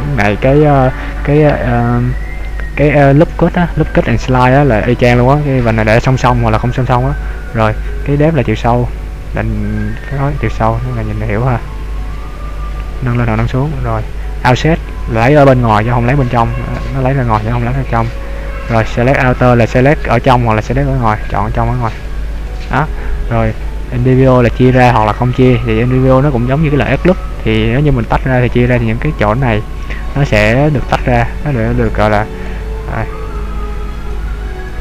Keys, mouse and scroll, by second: 6.9-8.1 scroll down 3, 8.1 click, 13.5-14.5 scroll down 2, 14.7 click, 15.5 scroll down 2, 17.8 click, 18.8 click, 21.3 click, 21.6 click, 22.1 click, 22.6 click, 24.1 click, 25.1 click, 32.6 click, 33.5 click.